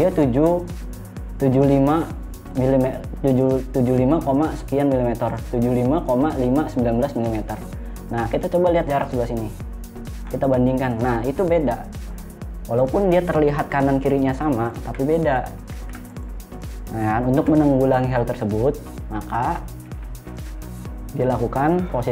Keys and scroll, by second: 14.4 Delete, 16.2 ctrl+z, 17.8 Delete.